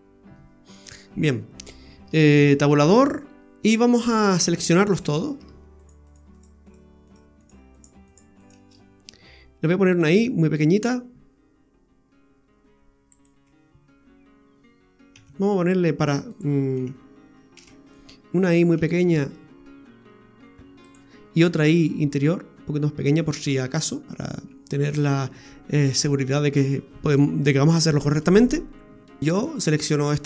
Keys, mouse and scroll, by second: 1.0-1.5 scroll up 2, 1.5-2.2 scroll down 1, 2.3 Tab, 2.9 right click, 4.3 shift+right click, 4.8 shift+right click, 5.2 scroll down 2, 5.8 shift+right click, 6.0 shift+right click, 6.3 shift+right click, 6.6 shift+right click, 7.1 shift+right click, 7.4 shift+right click, 7.8 shift+right click, 8.1 shift+right click, 8.4 shift+right click, 8.8-9.7 scroll up 1, 10.0 i, 15.1 s, 16.8 ctrl+z, 17.6 ctrl+z, 23.6-24.0 scroll up 3, 26.2-27.6 scroll down 3, 28.9-29.2 scroll up 2, 29.2 click, 29.3 right click, 29.6 shift+right click.